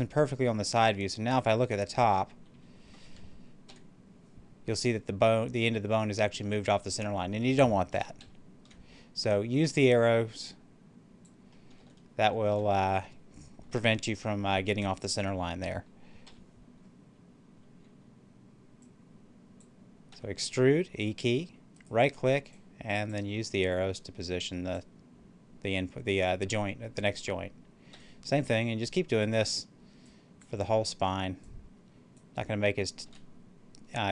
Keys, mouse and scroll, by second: 0.5-4.5 middle drag, 7.8 middle click, 8.1 ctrl+z, 9.8-11.6 drag, 11.6 ctrl+z, 18.7-20.0 drag, 20.0 e, 21.7 right click, 22.4-27.2 drag, 27.8 e, 28.3 right click, 28.8-32.9 drag, 32.9 e.